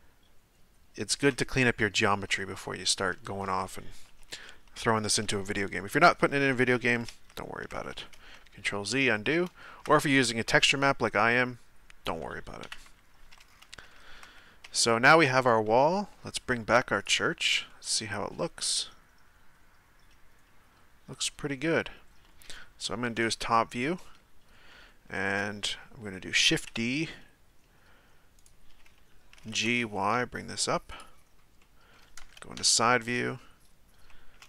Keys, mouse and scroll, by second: 2.3-7.1 middle drag, 7.1 ctrl+z, 7.9-12.6 middle drag, 12.6 KP_1, 13.5-13.9 scroll down 2, 13.9-14.6 shift+middle drag, 14.6 Tab, 15.3 right click, 17.0 click, 17.7-20.7 middle drag, 22.9 KP_7, 24.7-26.5 shift+middle drag, 26.5 shift+d, 29.3 g, 31.6-32.5 middle drag, 32.5 KP_3, 33.3-34.4 scroll up 1.